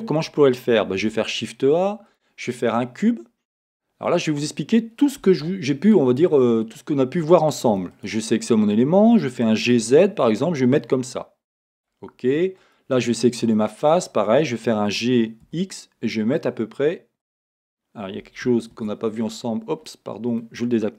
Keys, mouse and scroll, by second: 1.0 shift+a, 2.2-5.9 middle drag, 2.6-3.0 scroll, 5.2 Tab, 5.9 right click, 6.7 click, 7.7 3, 8.0 click, 9.2 g, 11.8-12.8 drag, 13.6-17.4 middle drag, 14.9 g, 17.4 click, 18.9 shift+Tab, 19.9-20.9 middle drag.